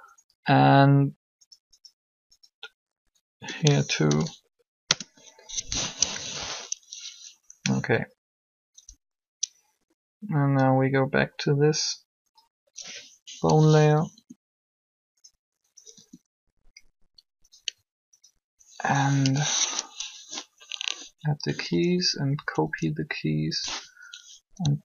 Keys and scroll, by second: 3.2 Delete, 3.8 shift+h, 4.8 Return, 6.0 3, 8.8 Up, 14.0 r, 15.9 r, 19.1 shift+i, 22.3 Up.